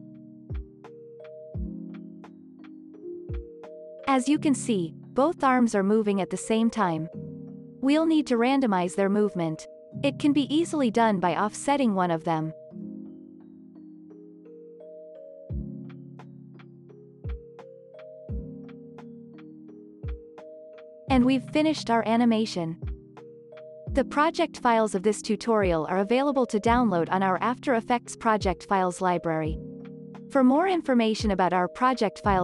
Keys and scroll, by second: 0.5 space, 7.1 space, 15.5 ctrl+z, 20.0 ctrl+s, 21.0 space.